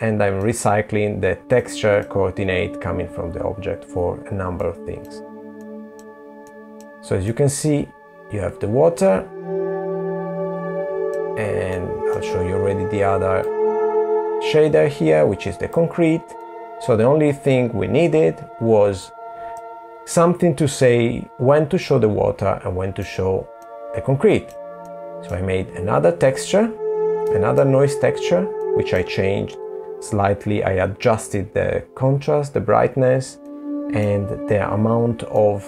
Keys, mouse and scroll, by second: 1.6-2.3 scroll down 4, 2.9 middle click, 3.9 middle click, 4.7 middle click, 5.5 middle click, 10.0 middle click, 11.8 click, 14.7 middle click, 17.3 click, 22.0 middle click, 23.2 middle click, 25.6 middle click, 27.0 middle click, 33.7 middle click, 34.6-35.6 scroll down 3.